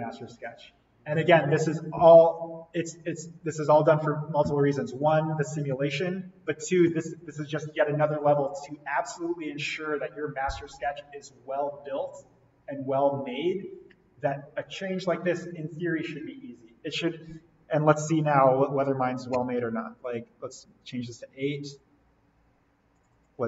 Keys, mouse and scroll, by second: 19.5 8, 20.0 click, 21.6-22.9 scroll down 1, 22.9 click.